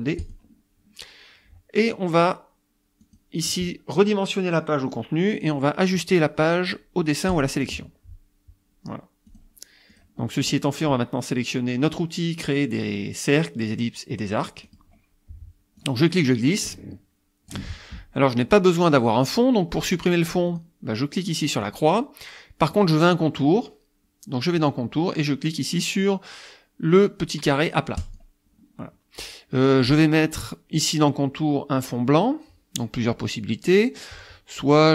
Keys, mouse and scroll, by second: 0.2 click, 3.0 click, 7.3 click, 9.3 click, 9.9 click, 10.2 click, 14.7 click, 15.8-17.7 drag, 20.5 click, 21.6 click, 22.7 click, 24.6 click, 28.0 click.